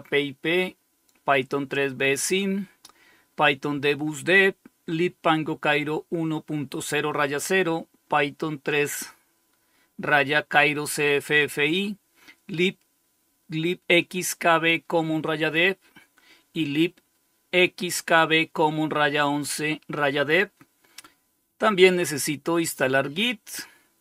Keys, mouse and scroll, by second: 21.9 click.